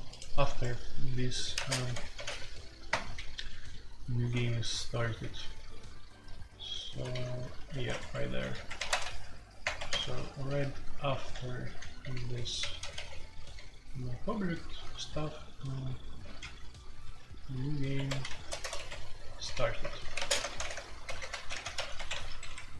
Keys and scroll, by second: 0.4 Escape, 1.5-2.2 typing, 2.9 Return, 3.5-4.3 typing, 4.4 ctrl+u, 5.1 ctrl+u, 5.6 ctrl+u, 6.1 ctrl+u, 6.2-15.1 typing, 8.0 Escape, 8.5 Return, 8.6 Escape, 16.2-21.7 typing, 21.9 Escape, 22.1 F2.